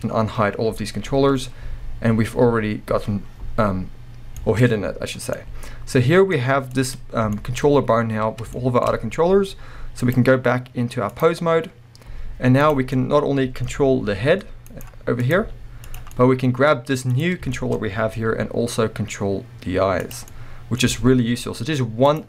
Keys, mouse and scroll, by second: 4.3-4.6 scroll down 2, 4.6-5.4 scroll up 2, 6.7 click, 7.3-10.0 shift+middle drag, 7.6-8.5 scroll up 2, 10.0-12.8 drag, 12.9 scroll down 2, 13.0-14.8 middle drag, 14.1 r, 14.8 right click, 15.2 click, 15.4 r, 16.0-17.1 middle drag, 16.0 click, 17.1 click, 17.5-20.1 shift+middle drag, 17.8-18.1 scroll up 2, 18.1 g, 20.1 click, 20.3-22.2 middle drag, 20.9 g, 22.2 click.